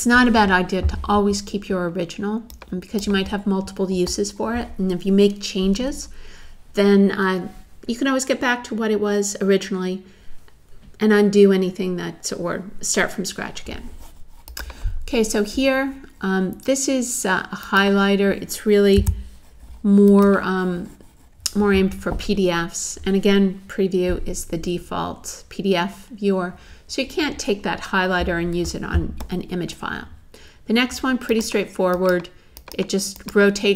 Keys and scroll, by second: 19.0 BackSpace.